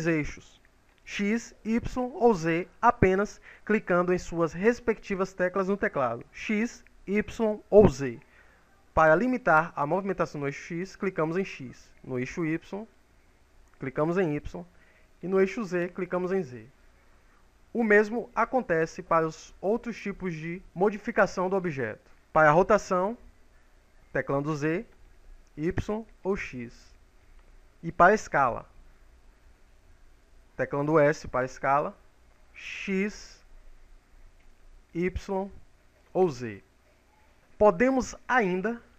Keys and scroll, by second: 10.3 x, 12.5 y, 16.3 z.